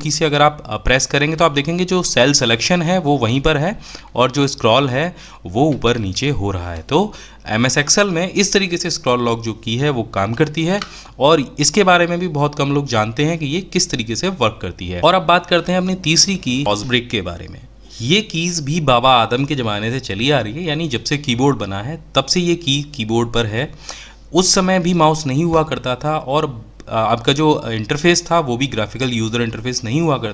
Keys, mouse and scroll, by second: 15.2 Pause.